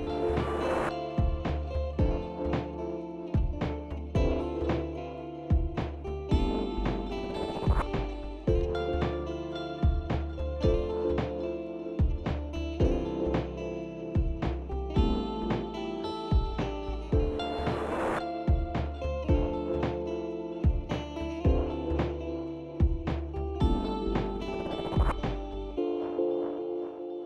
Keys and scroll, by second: 17.9 ctrl+z, 25.9 ctrl+s, 26.3 ctrl+s.